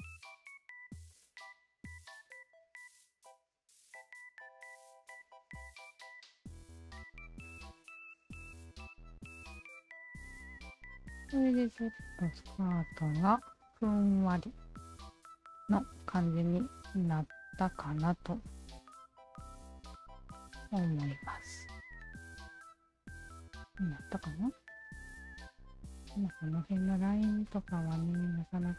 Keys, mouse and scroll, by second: 0.5 alt+right click, 1.1 alt+middle click, 1.5 alt+click, 2.9-4.7 alt+drag, 5.2 alt+click, 6.4 alt+shift+click, 7.6 alt+click, 8.0 alt+right click, 8.2-16.5 alt+drag, 17.5 alt+click, 18.3 alt+shift+click, 20.0 alt+shift+click, 21.1 alt+click, 21.8 Tab, 22.1 alt+click, 22.6 alt+right drag, 23.8-24.3 alt+right drag, 25.0 Tab, 27.5 alt+click.